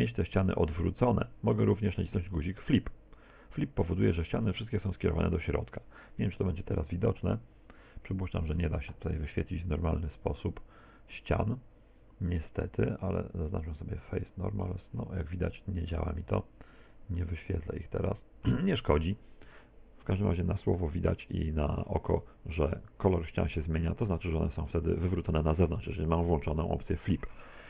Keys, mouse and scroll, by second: 0.5 Tab, 2.8 click, 6.2 n, 8.6 Tab, 9.1 a, 9.4 a, 13.6-14.4 scroll down 2, 14.4 click, 16.2 Tab, 17.2 middle click, 21.1 click, 22.2 middle click, 23.9 middle click, 24.7 shift+middle click.